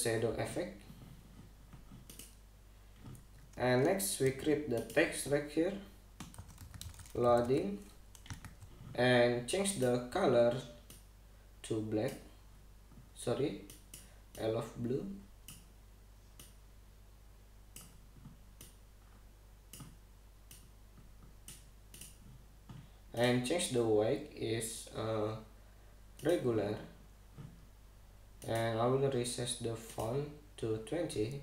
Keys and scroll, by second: 4.9 t, 6.8-8.7 typing, 8.9 super+g, 9.1 super+a.